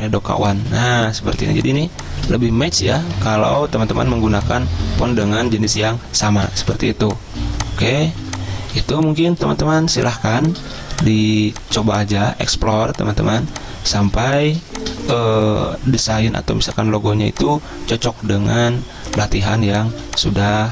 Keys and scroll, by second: 0.0-0.5 typing, 1.6-4.3 typing, 6.7 a, 8.9 z, 10.5 a, 11.9 a, 13.5 a, 14.3 z, 16.2 a, 20.1 z.